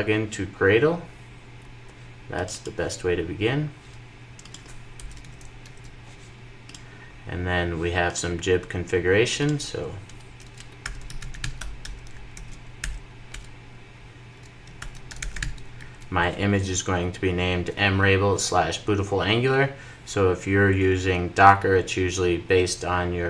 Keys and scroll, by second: 5.0 super+v, 5.4 super+s, 7.9 super+s, 12.7 super+j, 13.1 Return, 15.8 super+s.